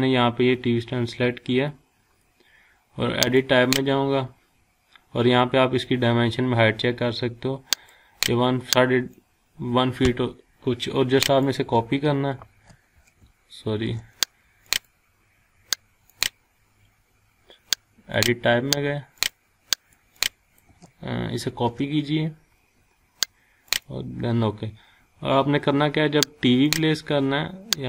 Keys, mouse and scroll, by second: 1.1-1.7 scroll down 1, 1.7-2.7 scroll up 1, 3.2 click, 7.7-11.6 drag, 12.4 c, 13.7 ctrl+z, 14.6 click, 21.4 ctrl+c, 23.7 click, 26.7 click.